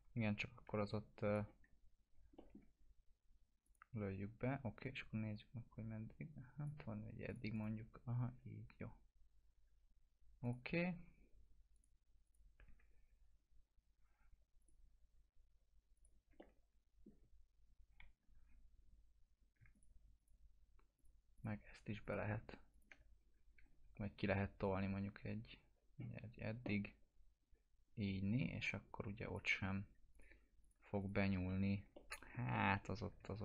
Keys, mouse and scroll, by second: 0.0 ctrl+z, 1.2 click, 1.8 scroll up 1, 2.3 alt+middle click, 2.8 scroll up 1, 3.6-6.7 drag, 8.2 scroll down 1, 10.4 click, 10.6 F4, 11.7 click, 14.6 click, 16.3-17.3 alt+middle drag, 18.9 scroll up 1, 19.7 ctrl+click, 23.1 scroll down 1, 23.3-24.2 typing, 24.6-29.6 drag, 31.2 F4, 31.9-32.8 alt+middle click, 33.3 ctrl+z.